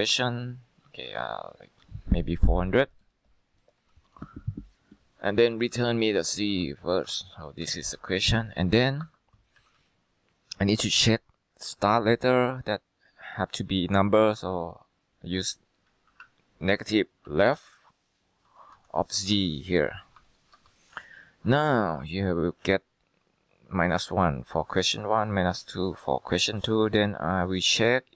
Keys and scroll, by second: 5.6-6.7 typing, 7.1 Up, 7.7 Down, 8.0 typing, 9.1 F2, 9.7 Left, 9.9 Left, 16.2-19.1 typing, 19.3 Down, 20.3 typing, 20.6 Return.